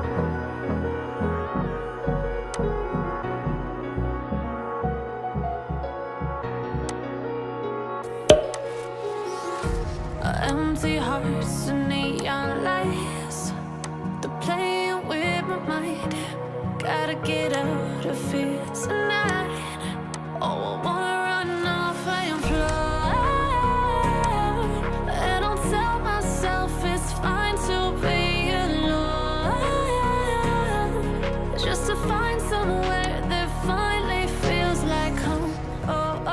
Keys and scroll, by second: 16.2 ctrl+t.